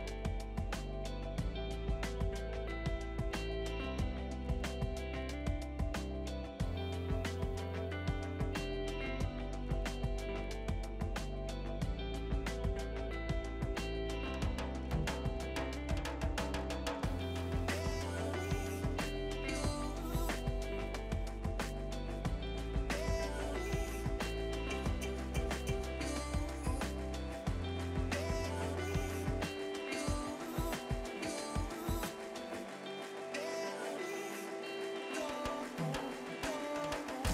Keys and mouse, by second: 0.0 Delete, 0.7 click, 3.2 Delete, 3.4 click, 3.7 Delete, 4.0 click, 4.1 Delete, 4.5 click, 4.6 Delete, 5.2 click, 5.4 Delete, 7.4 click, 7.8 Delete, 8.4 click, 8.7 Delete, 9.2 click, 18.0 Escape, 18.4 click, 19.9 right click, 20.7 click, 25.5 Delete, 26.0 click, 26.4 Delete, 26.7 click, 27.1 Delete, 27.3 click, 27.6 Delete, 27.8 click, 28.2 Delete, 29.1 click, 29.4 Escape, 29.8 click, 30.1 right click, 30.3 click, 32.0 Delete, 32.3 click, 32.5 Delete, 32.8 click, 33.0 Delete, 33.3 click, 33.5 Delete, 33.7 click, 34.0 Delete, 34.3 click, 34.7 Escape, 35.0 click, 36.0 Escape, 36.3 click.